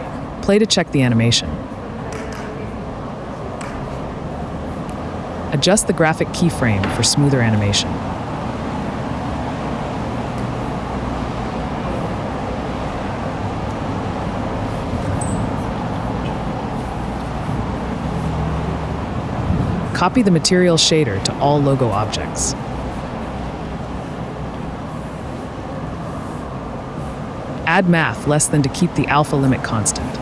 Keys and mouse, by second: 0.0 click, 1.2 click, 3.4 ctrl+z, 3.5 click, 3.8 space, 6.2 space, 6.2 click, 6.7 KP_Decimal, 7.6 click, 8.5 s, 8.7 x, 10.5 click, 11.6 r, 12.8 s, 13.8 r, 14.5 click, 14.9 s, 16.2 KP_Decimal, 16.8 click, 16.9 space, 19.4 space, 20.3 click, 23.6-25.5 right drag, 25.9 space, 28.0 space, 29.2 click, 29.3 shift+a.